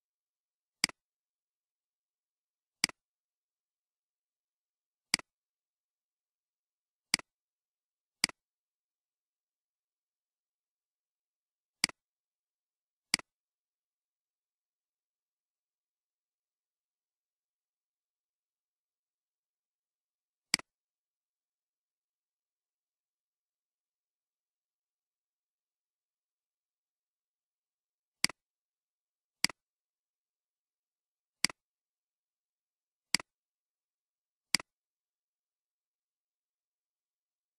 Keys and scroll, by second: 1.3 Delete, 22.9 ctrl+z, 23.4 ctrl+z, 30.2 Escape.